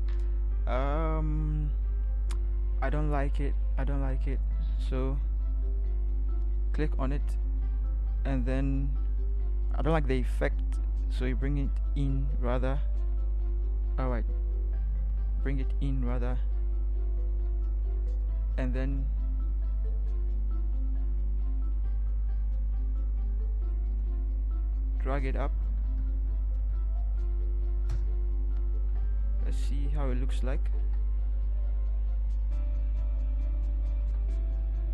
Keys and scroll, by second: 4.4 ctrl+t, 7.6 ctrl+t, 25.2 Up, 25.6 Up, 25.8 Up, 26.1-26.5 Up, 27.9 Return, 29.5 ctrl+0, 30.8 ctrl+0, 34.0 ctrl+0.